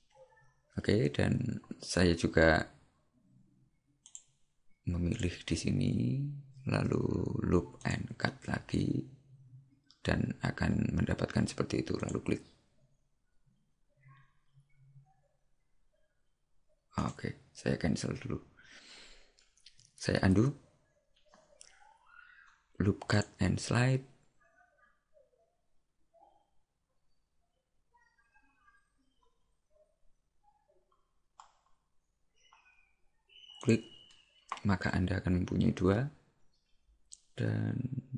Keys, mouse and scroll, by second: 4.2 click, 5.2 right click, 7.8 click, 23.1 click.